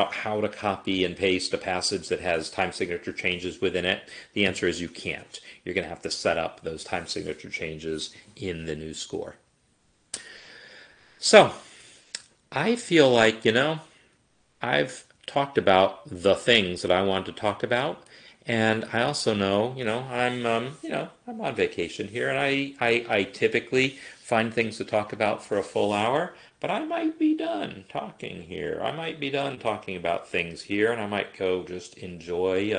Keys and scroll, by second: 15.0 x, 17.7 Escape.